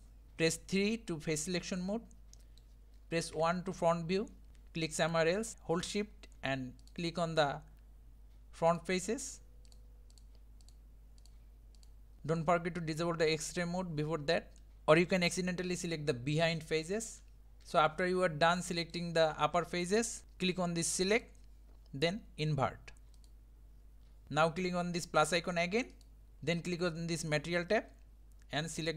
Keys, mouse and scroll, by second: 0.0-1.4 shift+middle drag, 1.4 3, 1.9-2.2 scroll up 2, 2.4 middle click, 3.4 KP_1, 6.9 shift+click, 8.8 shift+click, 9.3 shift+click, 9.8 shift+click, 10.2 shift+click, 10.7 shift+click, 11.3 shift+click, 11.9 shift+click, 14.6 middle click, 15.2-17.6 middle drag, 17.6 shift+click, 17.8-23.3 middle drag, 23.3-28.9 drag.